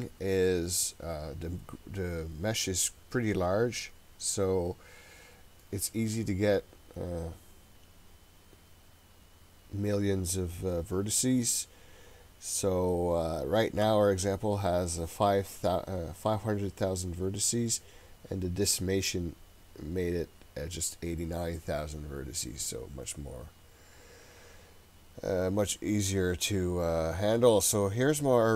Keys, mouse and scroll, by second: 23.2-24.1 scroll down 4, 25.7-28.5 middle drag.